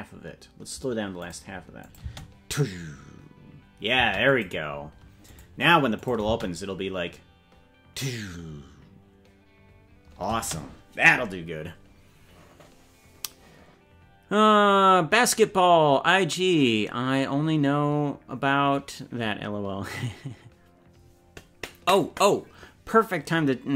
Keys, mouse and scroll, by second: 1.8-3.5 drag, 2.0 space, 4.2 click, 5.2 click, 5.9 click, 6.2 space, 10.3 space.